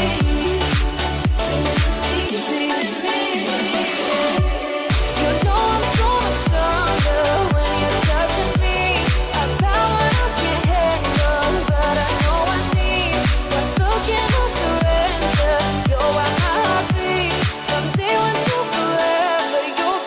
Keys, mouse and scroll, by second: 3.6 click, 6.4 click, 8.0 scroll down 1, 9.3 click, 9.8 scroll down 1, 10.9-15.1 drag, 15.5 click, 16.1 scroll up 1, 18.2 shift+a.